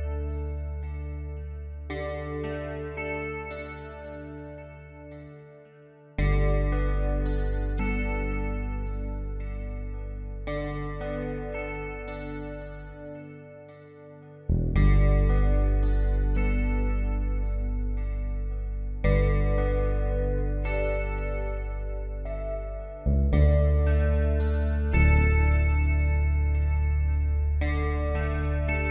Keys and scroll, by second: 24.4 F3, 25.1 w, 25.5 space.